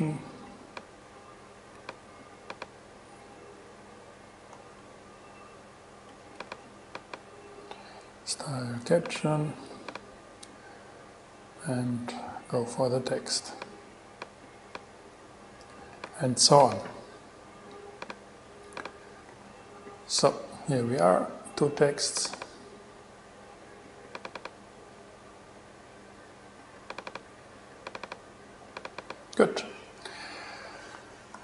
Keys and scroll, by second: 2.0 super+c, 4.8 super+v, 16.1 super+c, 19.5 super+v.